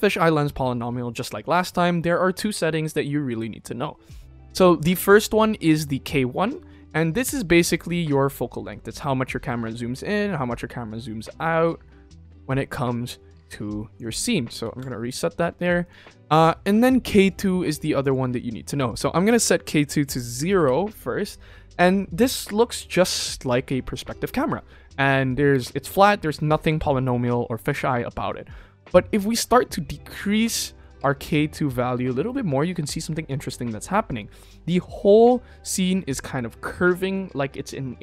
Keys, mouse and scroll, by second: 7.3-13.9 drag, 14.7 ctrl+z, 15.7 click, 16.6 ctrl+s, 17.9 click, 20.5-23.5 middle drag, 29.4-32.6 drag.